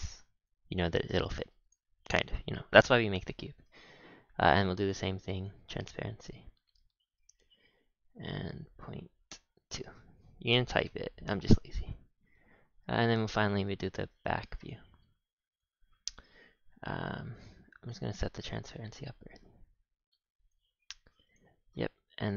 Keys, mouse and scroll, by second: 0.0 scroll down 7, 0.9-1.6 scroll down 1, 1.6 click, 3.5-4.4 scroll up 4, 4.4-5.4 drag, 5.8-10.1 drag, 10.1-10.8 scroll down 3, 11.4-12.9 middle drag, 12.9 ctrl+KP_1, 13.6 shift+a, 15.6 shift+a, 17.3-18.2 drag, 18.5-22.2 drag, 22.2 g.